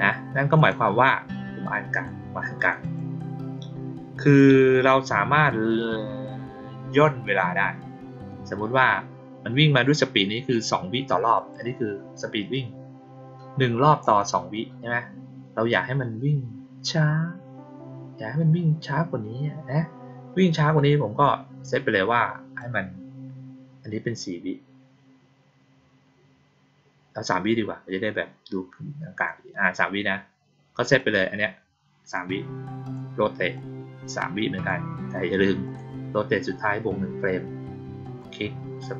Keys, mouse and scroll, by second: 0.5 click, 1.8 click, 2.5 click, 2.7 click, 11.3 click, 13.9 click, 22.5-29.2 drag, 30.9-32.0 drag, 32.8 click, 33.5-34.6 drag, 35.6 click, 38.0 click, 38.8 middle click.